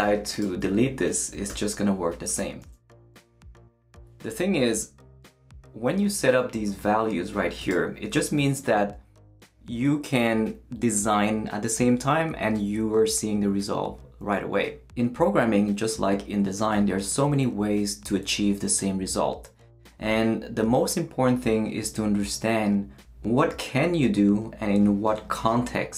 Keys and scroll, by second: 1.5 shift+BackSpace, 2.5 super+BackSpace, 2.6 super+s.